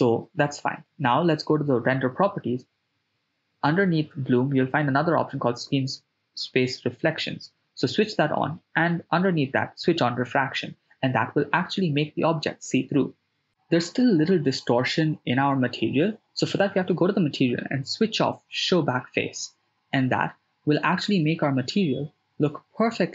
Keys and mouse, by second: 1.5 shift+space, 5.0 shift+space, 5.7 shift+space, 6.5 shift+space, 7.0 shift+space, 8.1 shift+space, 14.9 click, 16.6 click, 18.3 shift+space.